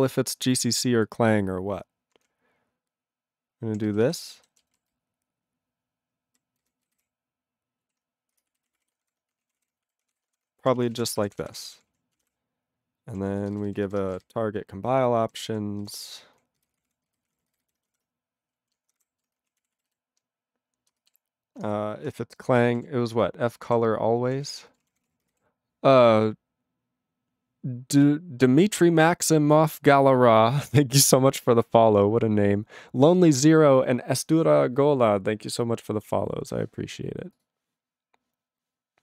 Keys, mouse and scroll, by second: 2.4-3.7 ctrl+p, 3.8 ctrl+b, 4.0 ctrl+b, 4.2 ctrl+space, 4.2 ctrl+e, 4.4 ctrl+b, 4.9 alt+w, 5.0-6.4 ctrl+n, 6.6 ctrl+n, 6.8 ctrl+b, 6.9 ctrl+y, 7.8 ctrl+e, 8.3-10.8 typing, 9.5 ctrl+a, 9.6 Tab, 10.9 ctrl+n, 11.0 Tab, 11.2 ctrl+p, 11.4 ctrl+p, 11.6 ctrl+p, 11.7 ctrl+p, 11.9 ctrl+a, 12.1 ctrl+e, 12.3-13.1 ctrl+p, 13.2 ctrl+a, 13.5 ctrl+space, 13.5 ctrl+n, 13.7 ctrl+n, 13.8 ctrl+n, 14.2 alt+w, 14.4-15.3 ctrl+n, 15.5 ctrl+p, 15.8 ctrl+n, 16.0 ctrl+y, 16.4 ctrl+p, 16.6 ctrl+n, 16.7 ctrl+space, 16.7 ctrl+p, 16.9 ctrl+p, 17.1 ctrl+g, 17.3 ctrl+p, 17.3 ctrl+e, 17.5 ctrl+n, 17.6 ctrl+n, 19.0 alt+^, 19.6 ctrl+a, 19.7 ctrl+e, 19.9 ctrl+b, 20.9 space, 21.7 -, 21.7 BackSpace, 22.9-25.9 typing.